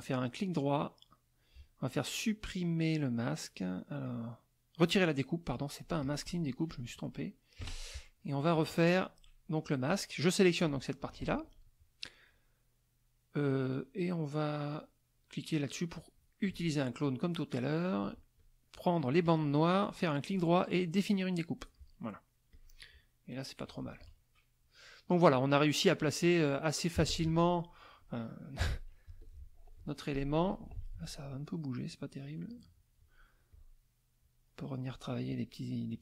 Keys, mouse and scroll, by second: 0.4-5.1 right drag, 6.0 click, 6.7 click, 7.6 Delete, 8.5 click, 10.6 click, 11.2 ctrl+z, 16.0 click, 18.1 shift+click, 19.8-21.3 right drag, 22.5 click, 23.7 KP_Subtract, 24.9 middle click, 26.2 middle click, 27.0 z, 27.1 click, 27.6 middle click, 29.1 z, 29.2 click, 29.8 F2, 29.9 middle click, 30.9 F2, 31.0 click, 31.9-33.2 drag, 33.5 click, 34.2 click, 35.3 click.